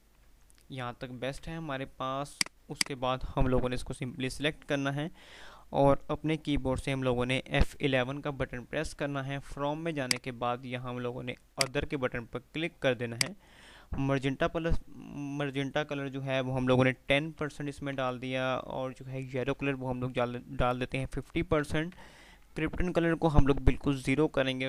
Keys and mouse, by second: 1.3-2.6 typing, 2.5 click, 8.2 F11, 10.1-13.8 drag, 18.1 Tab, 21.5 Tab.